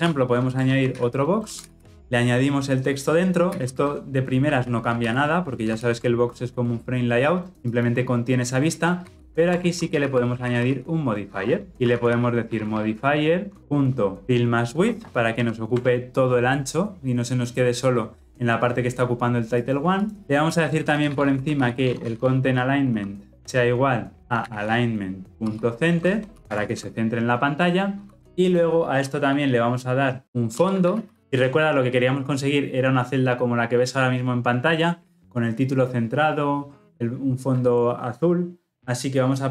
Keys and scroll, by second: 1.9 ctrl+alt+o, 3.4 ctrl+x, 5.1 ctrl+v, 5.6 ctrl+alt+l, 5.7 ctrl+alt+o, 25.3 Return, 26.6 ctrl+alt+o.